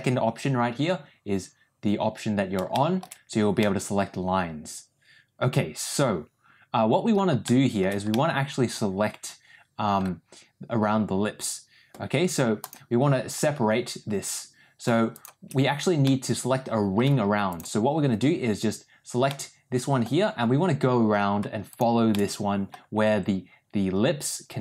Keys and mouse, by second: 2.6 shift+middle click, 3.5-7.0 middle drag, 7.3 shift+middle click, 8.0-9.9 middle drag, 12.6 click, 15.0 shift+click, 16.0 middle click, 19.2 middle click, 21.6 shift+click, 22.0 shift+middle click.